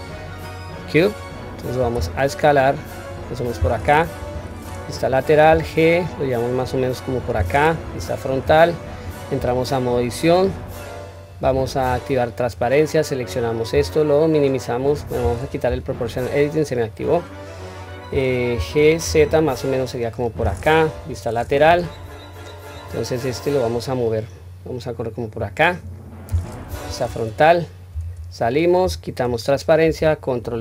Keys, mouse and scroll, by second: 4.2 KP_3, 5.5 g, 7.8 KP_1, 8.4-8.8 scroll up 1, 9.4 Tab, 9.4-10.8 scroll up 2, 11.8 q, 12.4 click, 13.7 s, 20.9 KP_3, 22.8 click, 23.2-23.7 drag, 24.5 click, 25.8 scroll down 1, 26.7 KP_1, 27.9 Tab, 28.8 q, 29.5 scroll up 1.